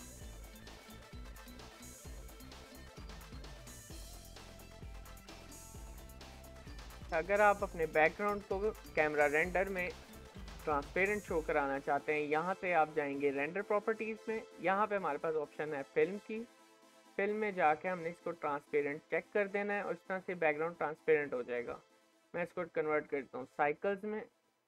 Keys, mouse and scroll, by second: 21.4-22.1 scroll up 2, 22.1-23.4 scroll up 1, 23.4-24.2 scroll up 1, 24.2-24.6 scroll up 1.